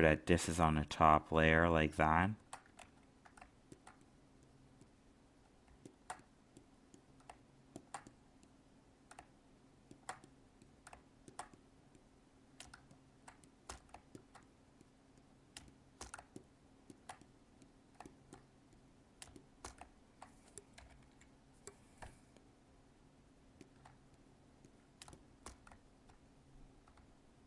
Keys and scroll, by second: 2.8 ctrl+z, 12.7 alt+space.